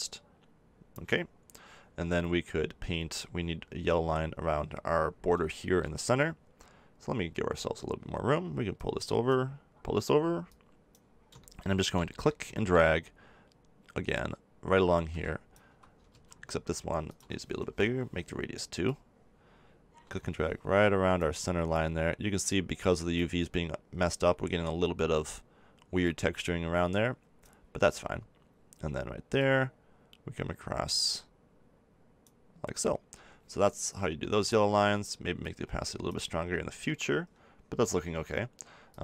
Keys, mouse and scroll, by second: 8.7-12.0 drag, 12.0-14.1 middle drag, 14.1-16.1 drag, 16.1 ctrl+z, 17.1-20.6 drag, 22.5-24.4 drag, 26.0-27.9 drag, 29.4-31.1 drag, 35.4-37.3 drag, 38.9 click.